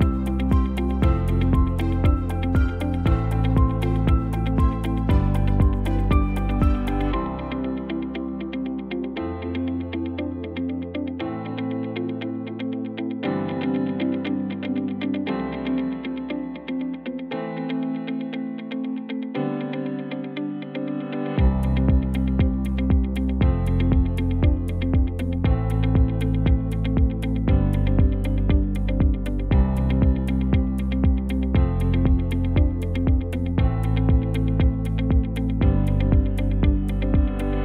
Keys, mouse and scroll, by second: 12.6 ctrl+shift+[, 27.4 shift+a, 31.6 m, 34.7 x, 35.1 shift+a.